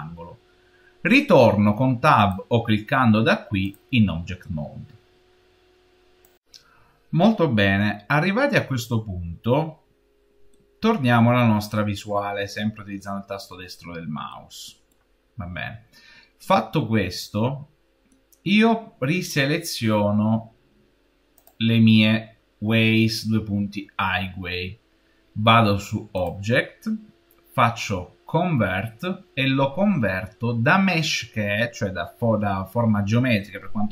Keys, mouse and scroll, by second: 2.1 click, 10.6 middle click, 11.0-12.3 middle drag, 12.3-13.7 scroll down 5, 13.7-14.2 scroll down 1, 14.2 middle click, 15.1-16.1 scroll down 4, 16.1-16.8 scroll down 3, 16.8-19.8 middle drag, 21.2-24.2 drag, 26.0-29.1 drag.